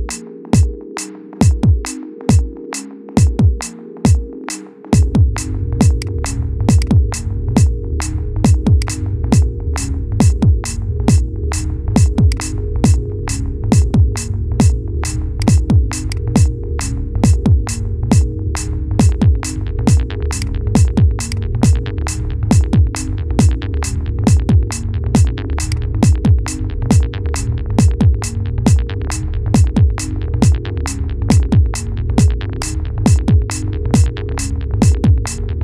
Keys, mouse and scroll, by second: 0.0 ctrl+KP_Add, 2.2-4.3 middle drag, 4.3 KP_1, 4.7 scroll down 2, 5.7 click, 7.6 scroll down 3, 7.9-8.5 shift+middle drag, 8.5 shift+click, 10.1-11.0 scroll up 1, 11.0 Delete, 12.6 scroll down 2, 13.0 Tab, 13.8-14.4 shift+middle drag, 14.4 Tab, 15.8 click, 16.5-18.0 scroll up 3, 18.0 p, 19.5 scroll down 2, 20.1 click, 20.7-21.1 scroll up 2, 21.1 click, 22.1 KP_7, 22.6 scroll up 2, 23.7 s, 26.2 KP_1, 26.7-27.0 scroll down 3, 27.3-27.8 shift+middle drag, 27.8-28.4 scroll up 2, 28.4 g, 32.3 click, 32.9-33.3 scroll up 2, 33.3-33.9 shift+middle drag, 33.9 g.